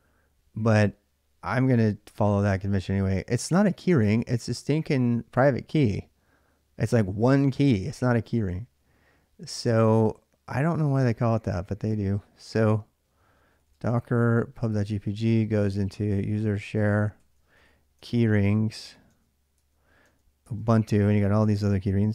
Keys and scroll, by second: 1.8 ctrl+a, 2.0 ctrl+a, 10.2-19.1 typing, 19.4 Tab, 20.2 Tab.